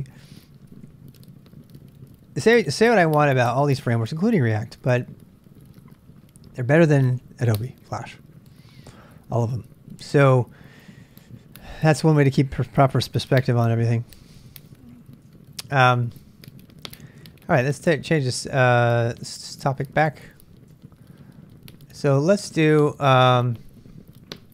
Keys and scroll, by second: 14.5-20.8 typing, 21.9-24.5 typing.